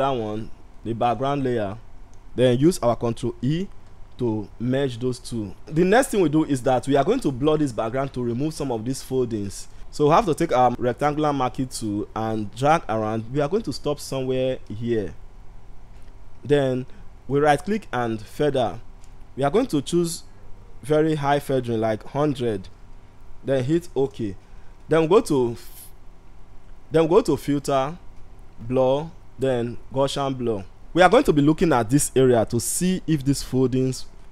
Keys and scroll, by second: 2.8 ctrl+e.